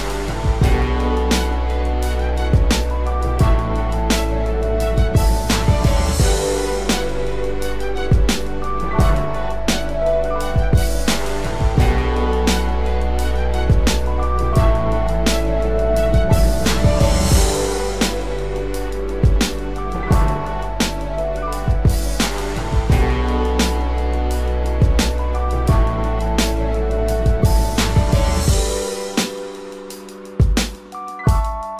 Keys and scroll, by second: 10.0 ctrl+-, 10.5 ctrl+=, 12.0 ctrl+-, 13.6 ctrl+-, 16.0 ctrl+-, 16.2 ctrl+0, 17.9 ctrl+=, 19.3 ctrl+0, 20.3 ctrl+0, 21.3 ctrl+=, 24.7 ctrl+space, 25.3 ctrl+=.